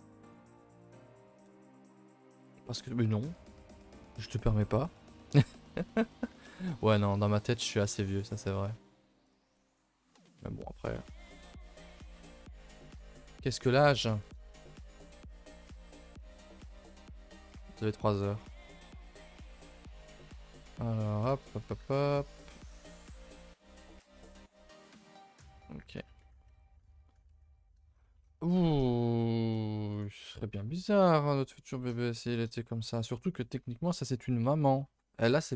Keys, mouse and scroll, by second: 1.4 KP_0, 2.4 KP_0, 5.9 middle drag, 6.2 scroll up 1, 6.4 ctrl+s, 6.8 shift+middle drag, 7.0-7.8 scroll up 1, 7.8 KP_0, 8.8 click, 9.2 click, 9.5 middle click, 9.9-10.2 scroll up 2, 10.2 shift+click, 11.5 Tab, 12.1 ctrl+i, 12.3 h, 12.8 a, 12.9 a, 13.2 ctrl+s, 13.6 click, 14.2 KP_0, 14.9 shift+middle click, 15.2 scroll up 4, 16.5 click, 17.9-19.0 drag, 20.2 click, 21.5 click, 22.7 click, 23.5 click, 24.7 click, 28.2-28.5 scroll down 8, 28.5 shift+middle drag, 28.8 scroll up 2, 29.0 scroll down 1, 29.1-29.5 scroll up 1, 29.5-29.9 shift+middle drag, 29.9-31.8 scroll down 2, 31.8-32.2 scroll down 3, 32.2-35.4 scroll up 2.